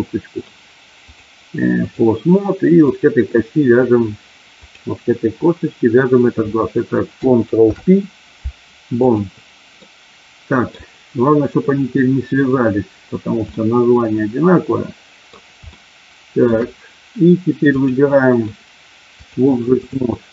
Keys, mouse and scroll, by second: 1.1 click, 2.9 click, 7.7 ctrl+p, 9.8 middle click, 13.5-15.3 middle drag, 15.7 shift+middle click, 17.6 click, 19.2 click.